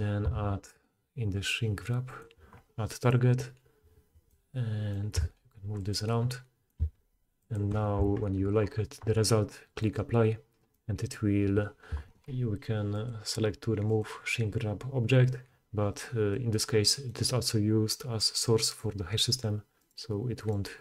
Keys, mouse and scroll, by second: 4.2-9.9 middle drag, 5.2 g, 6.8 g, 9.9-14.0 drag, 14.0-18.6 middle drag, 18.6 click, 18.8-19.8 middle drag, 19.8 click, 19.9-20.4 middle drag, 20.4 click, 20.5-20.8 middle drag.